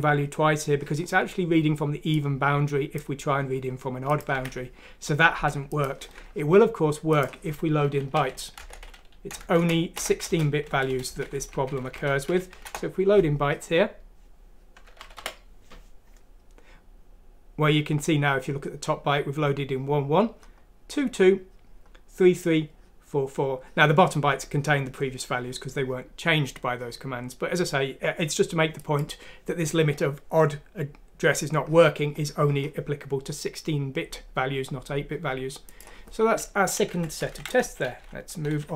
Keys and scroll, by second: 4.4 alt+Tab, 8.1-13.0 typing, 8.6 Insert, 9.3 Insert, 14.3-15.1 typing, 37.2 shift+Home.